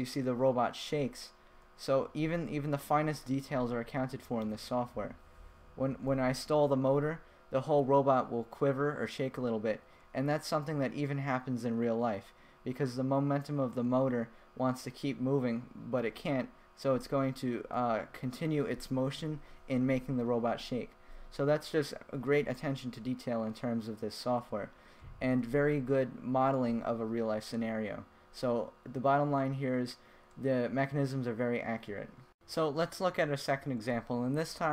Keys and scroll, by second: 1.5 Left, 2.4 Right, 3.0 Right, 5.1 Left, 11.4 Right, 12.7 Left, 15.5 Right, 16.6 Left, 23.0 Left, 23.9 Right, 25.3 Left, 26.1 Right.